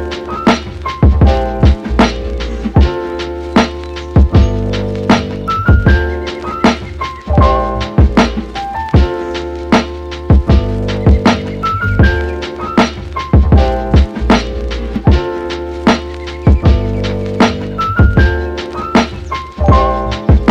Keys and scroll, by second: 0.0-0.4 typing.